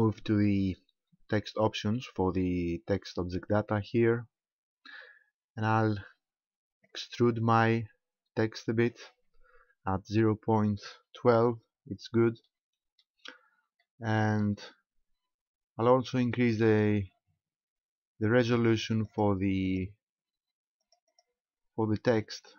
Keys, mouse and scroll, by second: 3.4 click, 6.9 click, 12.5 shift+middle click, 13.2 scroll up 2, 13.8 middle click, 19.1 click, 19.7 click, 20.9 click, 21.1 click.